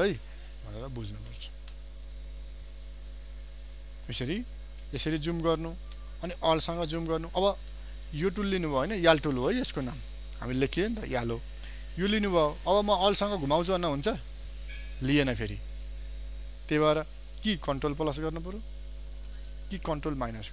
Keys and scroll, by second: 5.0 ctrl+space.